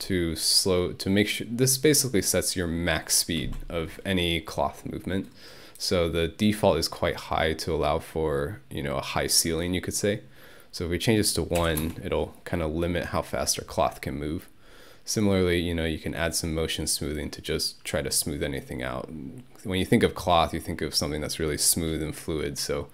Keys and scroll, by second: 11.6 1, 11.8 Return.